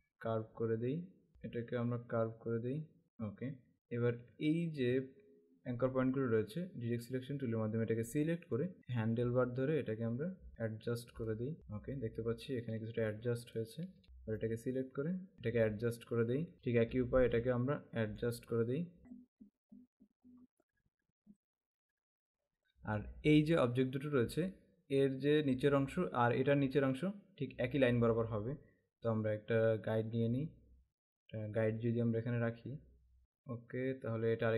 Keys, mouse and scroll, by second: 1.5 click, 5.2 alt+scroll up 1, 7.1 click, 8.7 click, 9.1 click, 10.6 click, 13.1 space, 13.4 click, 13.5 space, 14.3 click, 16.5 space, 17.0 alt+scroll up 1, 18.1 click, 19.2 click, 20.6 alt+scroll down 1, 20.9 alt+scroll up 1, 21.2 click, 21.7 click, 22.6 space, 29.2 click.